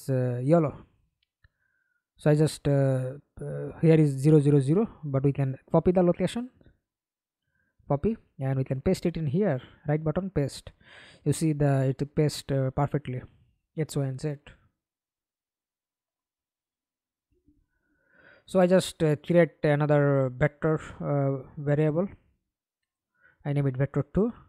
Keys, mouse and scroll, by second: 5.6 right click, 8.9 right click, 17.4 ctrl+d, 19.2 Right, 19.2 BackSpace, 19.4 BackSpace, 20.1 2, 20.5 Return.